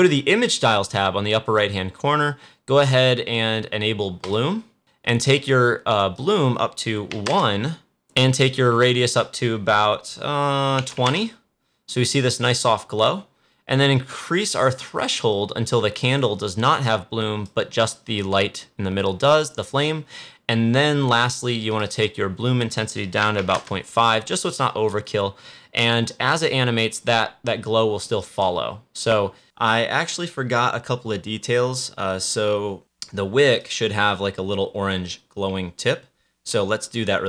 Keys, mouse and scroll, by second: 4.1 click, 6.1 click, 8.1 click, 14.4-19.8 drag, 21.6 click, 26.3 click.